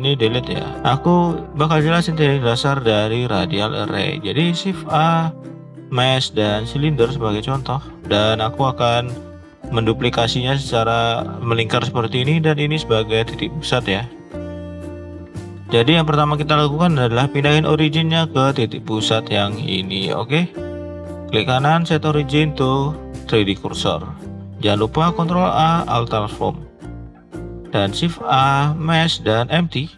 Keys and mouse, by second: 0.4 Delete, 3.9 shift+middle click, 4.7 shift+a, 7.5 click, 9.0 click, 9.7-11.4 drag, 12.2 click, 12.6 click, 14.4-15.6 ctrl+drag, 17.6 click, 21.0-23.3 right drag, 24.0 shift+middle click, 25.0 ctrl+a, 26.7 shift+middle click, 27.1 click, 27.6 shift+a.